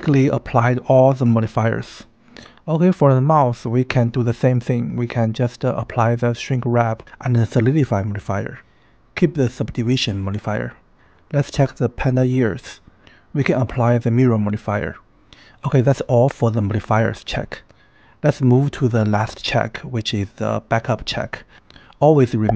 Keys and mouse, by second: 5.1-5.9 drag, 6.7-7.4 drag, 10.7 click, 11.8 click, 12.3-12.9 drag, 13.5 click, 13.9 click, 14.2 click, 19.9-20.2 shift+middle drag.